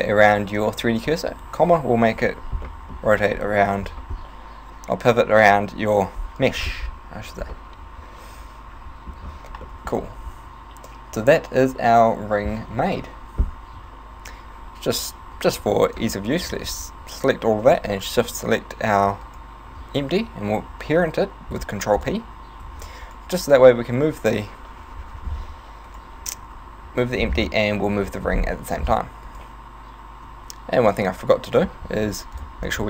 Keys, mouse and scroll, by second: 1.3 ,, 2.7 middle click, 6.8 Tab, 7.3 scroll down 1, 7.6 middle click, 9.6 middle click, 13.8 z, 15.2 a, 15.8 a, 15.8 b, 18.0 shift+right click, 19.2 shift+right click, 20.8 ctrl+p, 22.8 a, 23.1 right click, 23.6 g, 25.9 right click, 26.2 z, 27.2-27.6 scroll down 7, 28.0 middle click, 28.2-29.0 scroll up 8, 29.4 right click, 30.2 z, 30.9 z, 31.0 z, 31.4 z, 32.4 click, 32.7 click.